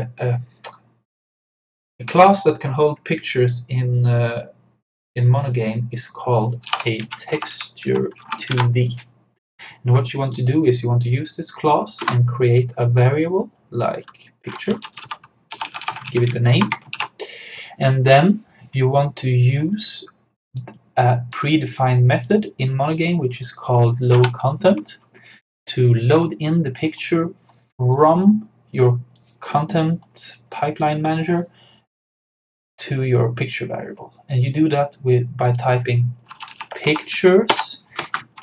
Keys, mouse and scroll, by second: 6.4-8.1 typing, 8.3 Down, 8.6 Return, 12.0 space, 14.5-17.5 typing, 19.7 click, 24.2 Return, 28.0-32.2 drag, 35.5 click, 36.1-38.4 typing, 37.6 Return.